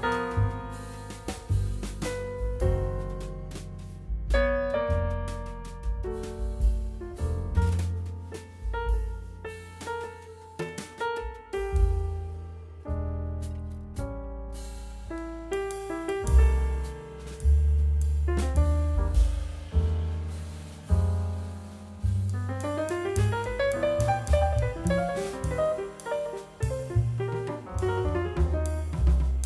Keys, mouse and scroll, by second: 28.7 scroll down 1, 29.3 middle click.